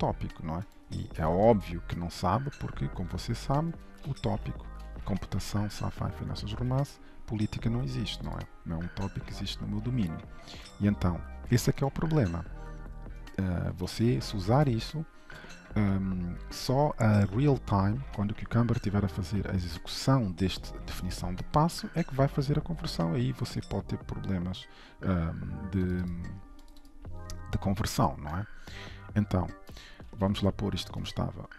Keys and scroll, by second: 1.8 ctrl+shift+F12, 4.1 ctrl+shift+i, 30.1 ctrl+z.